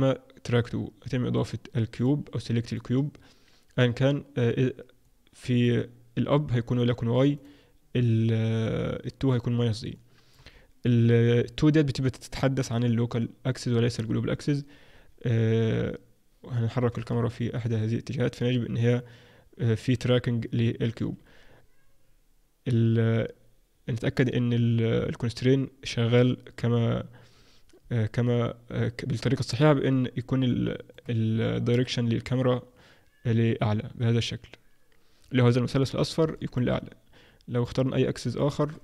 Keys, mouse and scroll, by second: 1.9 click, 5.1 click, 6.7 click, 9.3 click, 9.9 middle click, 10.5-12.4 scroll up 2, 12.4-12.9 scroll up 1, 13.9-16.7 scroll up 1, 16.7 scroll up 2, 16.7 g, 28.9-29.4 scroll up 2, 30.5 middle click, 31.4 middle click, 33.2-33.7 scroll up 1, 34.5-35.9 scroll up 4, 35.9-36.3 scroll up 3, 36.3 shift+middle click, 36.7-37.5 scroll up 1, 37.5 click, 37.5-38.2 scroll up 1, 38.3 shift+middle click.